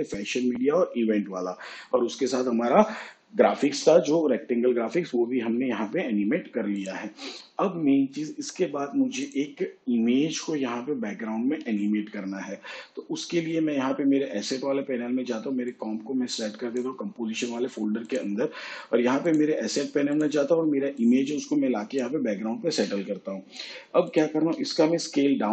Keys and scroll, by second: 24.5 s.